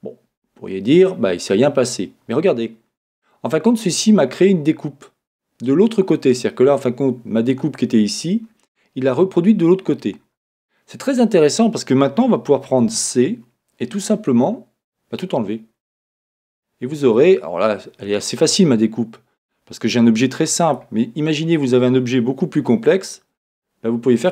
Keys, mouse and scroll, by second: 2.3 middle click, 4.8-6.7 middle drag, 9.9 middle click, 9.9 scroll down 1, 12.9 c.